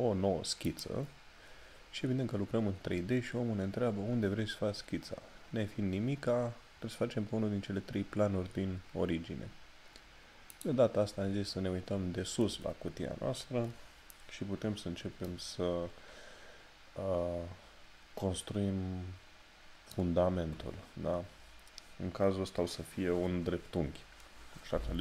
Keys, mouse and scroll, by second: 10.5 click, 15.2 middle click.